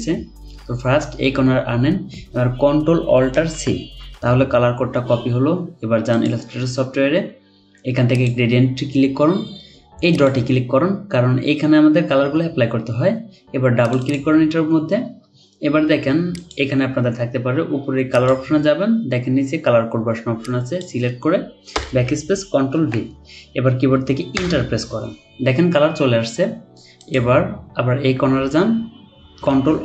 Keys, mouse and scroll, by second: 3.5 ctrl+alt+c, 14.0 double click, 21.7 BackSpace, 22.8 typing, 24.3 Return.